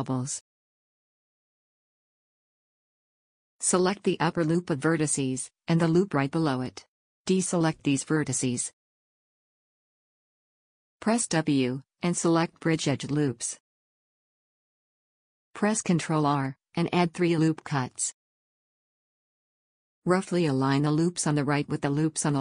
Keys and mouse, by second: 0.6-1.7 drag, 3.6 a, 11.4 w, 14.7 a, 15.7 ctrl+r, 18.7 click, 19.8 click, 19.9 middle click, 20.0-22.1 drag, 20.9 a, 22.1 g.